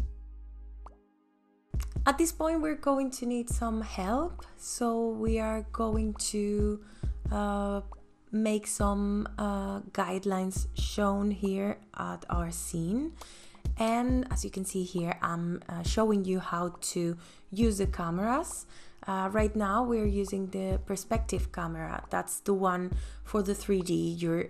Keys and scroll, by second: 2.2 ctrl+s.